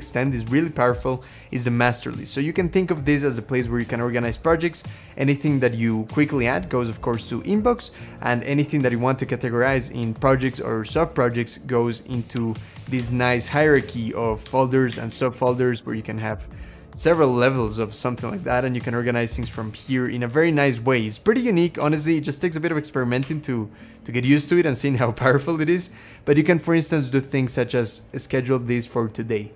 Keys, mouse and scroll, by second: 9.9 Down, 12.2 Right, 12.8 Down, 13.3 Down, 13.6 Down, 14.3 Down, 14.8 Up, 14.9 Up, 15.1 Up, 15.3 Up, 15.6 Right, 16.1 Right, 19.8 Left, 20.1 Down, 21.6 Down, 23.1 Right, 24.1 Right.